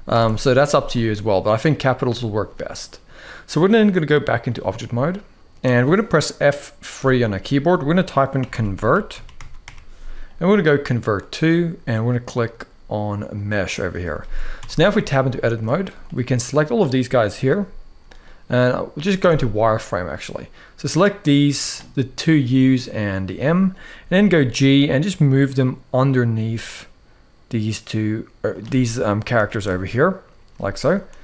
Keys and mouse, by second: 3.4-4.2 drag, 6.9 F3, 14.5 Tab, 15.1 shift+middle click, 15.9 click, 17.2 g, 18.9 z, 20.1-21.4 drag, 23.1 shift+middle click, 23.9 g, 29.2 shift+middle click, 30.3 shift+middle click, 30.8 z.